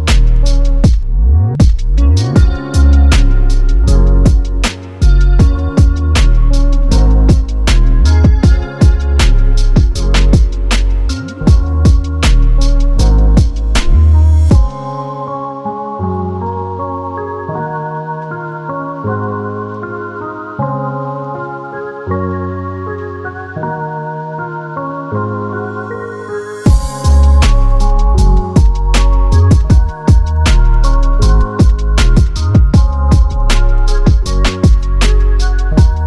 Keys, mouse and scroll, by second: 1.5 click, 8.3 click, 10.1 click, 11.5 Page_Down, 13.8 click, 27.0 click, 33.7 click.